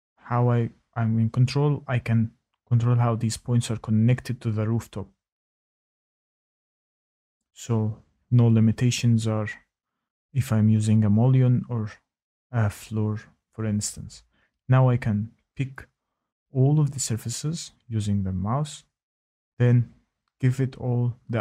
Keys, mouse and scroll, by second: 0.3 right click, 0.6 middle click, 0.6-1.0 middle click, 0.9 middle click, 1.2 middle click, 1.3 middle click, 2.4 middle click, 2.4 click, 5.0 click, 5.7 click, 6.3 scroll, 7.2 click, 7.5-8.1 scroll, 8.1 click, 8.4 middle click, 8.4 middle click, 9.5 shift+right click, 13.7 shift+right click, 14.1 middle click, 14.1 click, 14.5 shift+right click, 14.8 shift+click, 16.1 shift+click, 21.1 shift+right click, 21.2 shift+click.